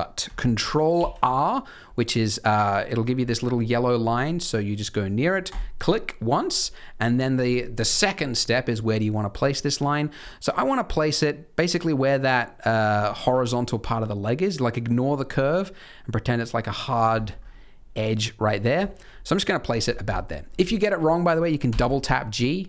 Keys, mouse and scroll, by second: 0.9 ctrl+r, 17.1-18.7 scroll up 7, 18.8 shift+middle click, 19.5-20.4 scroll down 3, 20.4-21.6 scroll down 3, 21.6 g.